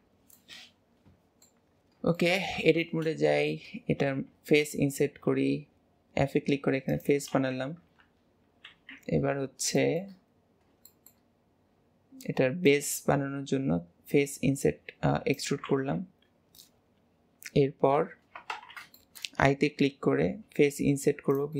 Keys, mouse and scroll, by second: 0.1 scroll down 2, 0.4-1.8 middle drag, 1.8-2.3 scroll up 2, 2.3 shift+middle click, 2.7 Tab, 3.3 alt+z, 8.1 KP_1, 8.8 alt+z, 9.9 shift+middle click, 10.3-10.7 scroll up 3, 10.9 middle click, 11.4-12.7 middle drag, 11.4-12.7 scroll up 2, 12.7 click, 18.6 alt+z, 19.1-20.3 shift+middle drag.